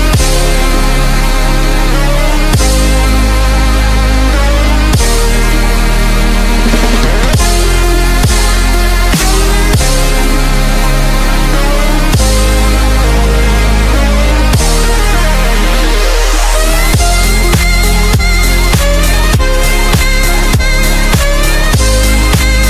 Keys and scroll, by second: 1.0 a, 16.1 ctrl+z, 17.9 alt+space, 18.4 alt+space.